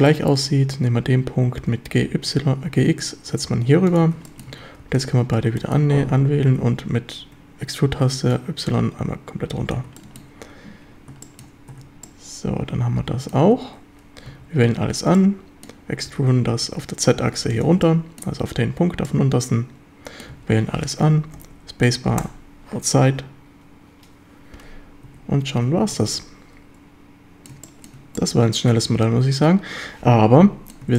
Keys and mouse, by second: 0.1 shift+click, 1.6 g, 2.0 x, 3.9 ctrl+click, 4.3 shift+click, 4.5 a, 4.8 b, 5.6 shift+click, 6.5 e, 7.3 Escape, 8.4-9.8 drag, 10.0 shift+drag, 11.3 shift+drag, 11.7 Tab, 12.1-13.4 drag, 14.3 a, 14.7 a, 15.2-15.7 middle drag, 16.1 e, 17.5 ctrl+click, 17.9-18.2 middle drag, 19.1-20.2 middle drag, 20.3 a, 20.7 a, 21.1 a, 21.4 space, 25.1 Tab, 25.6 a, 26.0 ctrl+s, 26.1-27.0 drag, 27.0-27.6 middle drag, 27.7 shift+middle click, 28.2-30.7 drag.